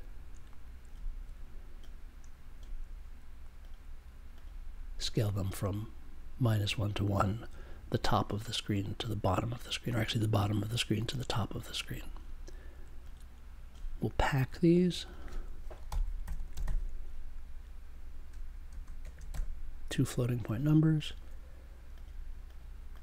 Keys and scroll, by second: 15.8 n, 18.6 space, 19.0 f, 19.1 space, 19.3 f.